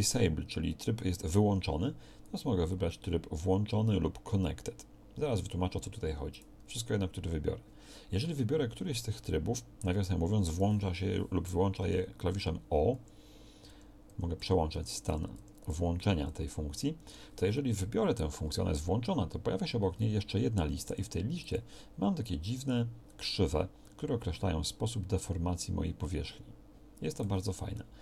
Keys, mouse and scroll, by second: 11.9-16.3 typing, 27.3 Tab.